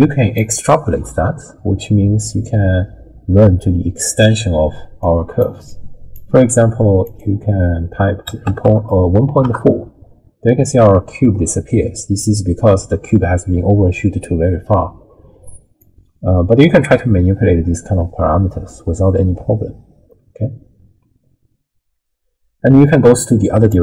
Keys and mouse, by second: 2.4-4.3 middle drag, 4.5-6.3 d, 5.0 click, 5.7 click, 7.2-9.5 drag, 15.9-23.7 drag.